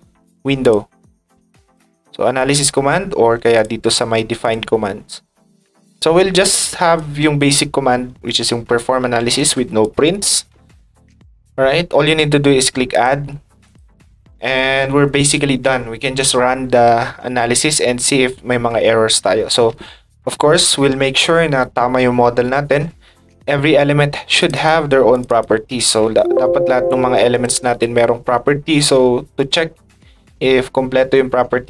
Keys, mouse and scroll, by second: 0.6 click, 1.7 click, 3.5 click, 4.4 click, 6.2 ctrl+click, 6.5 ctrl+click, 9.8 ctrl+click, 12.9 click, 13.6 click, 14.0 click, 24.4 click, 24.5 click, 25.1 click, 25.3 click, 27.3 click.